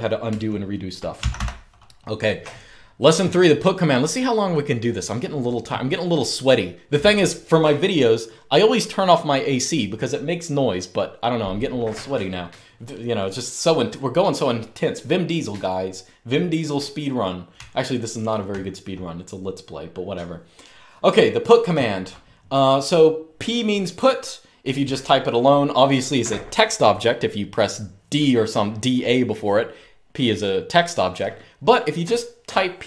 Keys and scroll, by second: 0.0-1.5 typing, 2.8-3.5 typing, 17.2-18.5 typing, 20.0 typing, 21.4-22.0 typing.